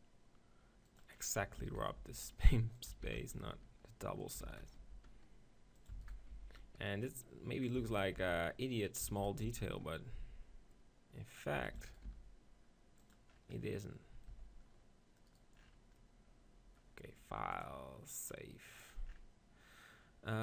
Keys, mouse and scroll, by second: 1.0 click, 1.6 alt+d, 2.0 r, 3.0 alt+d, 3.4 r, 4.5 alt+d, 4.8 r, 6.0 alt+d, 6.3 r, 7.8 r, 7.9 alt+d, 8.9 r, 9.1 alt+d, 9.5 r, 10.7 click, 10.7 right click, 11.8 alt+d, 12.0 right click, 12.1 r, 12.4 click, 14.0 click, 14.3 z, 17.1 click, 17.2 middle click, 17.7-19.3 drag, 19.3-20.4 middle drag.